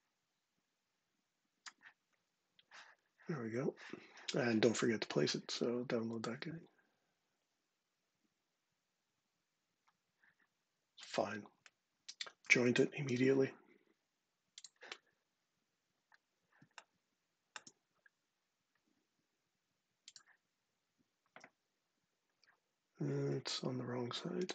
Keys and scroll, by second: 12.8 j.